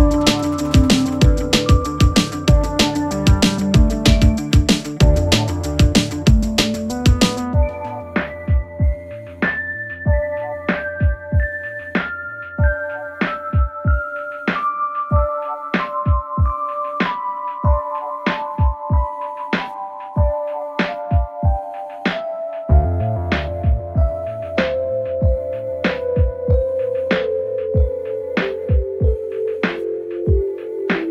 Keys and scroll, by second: 3.1 ctrl+c, 4.5 ctrl+v, 8.9 Escape, 11.0 Escape, 18.4 ctrl+z, 19.5 ctrl+z, 22.9 Delete, 26.8 1, 27.2 shift+', 27.4 Return.